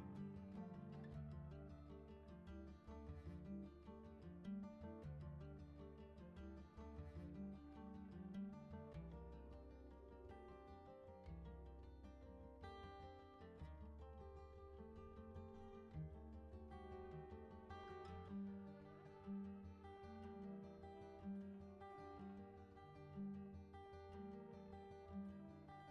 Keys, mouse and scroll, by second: 1.1-9.4 drag, 13.7-15.1 drag, 17.3 click, 18.4-19.7 drag, 20.9-25.9 drag.